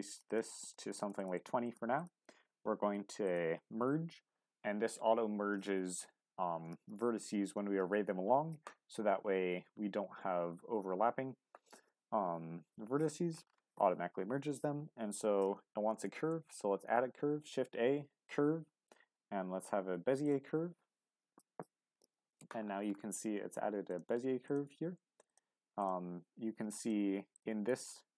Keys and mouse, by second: 0.5 click, 0.6-2.1 drag, 3.2-16.0 drag, 16.1 shift+a, 23.9-28.1 drag.